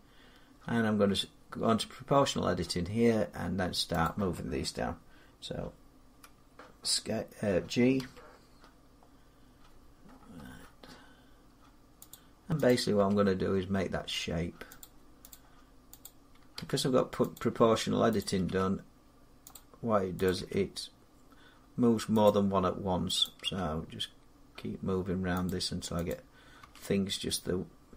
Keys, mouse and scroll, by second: 3.8 click, 7.8 g, 9.4-9.8 scroll up 4, 9.8-11.7 scroll down 14, 11.7 scroll down 1, 11.9 middle click, 11.9 click, 12.5 click, 12.9 g, 14.6 click, 15.1 click, 15.9 click, 16.4 g, 17.2 click, 18.0 click, 18.3 g, 19.4 click, 20.2 click, 20.2 g, 22.1 click, 23.1 click, 23.3 g, 25.3 click, 26.5 click, 26.5 g.